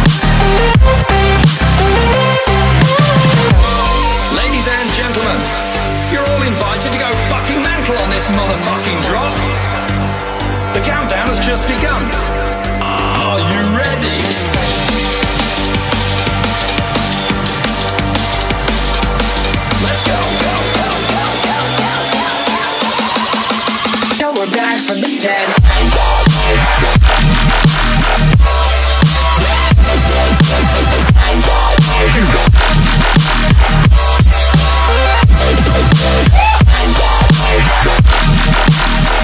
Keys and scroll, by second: 3.4 Delete, 4.3 space, 4.8 alt+super+space, 4.9 alt+super+space, 5.0 alt+super+space, 5.1 alt+super+space, 5.1-6.0 alt+super+space, 12.0 space, 12.5 alt+super+space, 12.6 alt+super+space, 12.7 alt+super+space, 12.8-13.6 alt+super+space, 15.7-16.8 typing, 26.6 v, 27.5-29.1 space, 29.2 space, 32.0 space, 32.6 super+space, 32.7 super+space, 32.8 super+space, 32.9 super+space, 33.0 super+space, 33.1 super+space, 33.4 super+space, 33.5 super+space, 33.6 super+space, 33.8 super+space, 33.8 super+space, 33.9 super+space, 38.1 super+z.